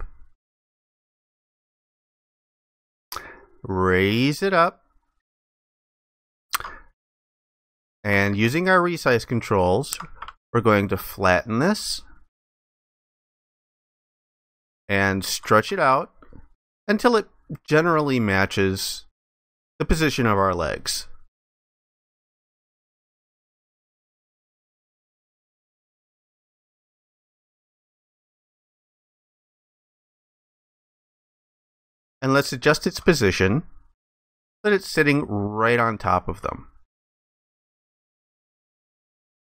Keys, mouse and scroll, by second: 5.8 alt+click, 8.5 ctrl+alt+click, 11.1 ctrl+shift+click, 14.7 ctrl+alt+click, 16.4 ctrl+shift+click, 19.7 ctrl+shift+click, 22.0 ctrl+alt+click, 24.4 ctrl+shift+click, 28.4 ctrl+shift+click, 32.0 ctrl+alt+click, 36.6 ctrl+alt+click.